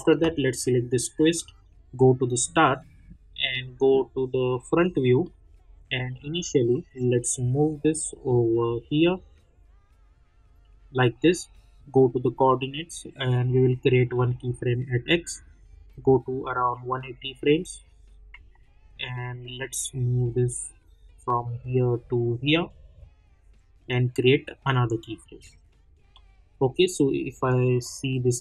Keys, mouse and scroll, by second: 2.3 click, 3.4 middle click, 6.8-12.0 drag, 15.6-17.7 drag, 17.7 scroll down 1, 18.5-19.9 alt+middle drag, 19.9-25.2 drag, 26.1 middle click, 27.7 click.